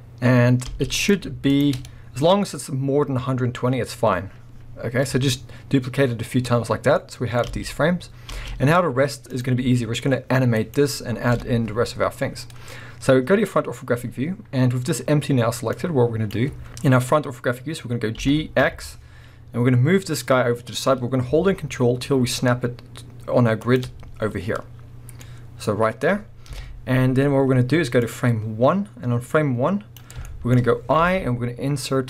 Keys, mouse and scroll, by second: 1.0 click, 1.5 shift+click, 2.1-5.4 scroll down 1, 7.0-9.3 middle drag, 7.5 space, 7.6 space, 9.3 click, 9.6 g, 10.7 right click, 11.3 KP_1, 15.8-23.8 drag, 17.2-18.2 scroll up 2, 18.2 g, 24.4 scroll down 1, 25.2-26.5 scroll up 1, 26.5-28.0 middle drag, 26.5 KP_1, 28.0-30.3 drag, 30.3-32.0 shift+middle drag.